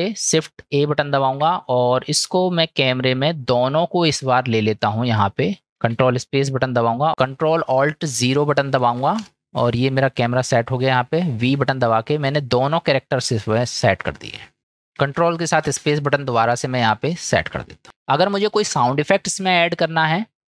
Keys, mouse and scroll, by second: 1.2 shift+a, 5.3-5.9 middle drag, 5.9 ctrl+space, 9.2 ctrl+alt+KP_0, 11.7 v, 15.8 ctrl+space, 17.6 click.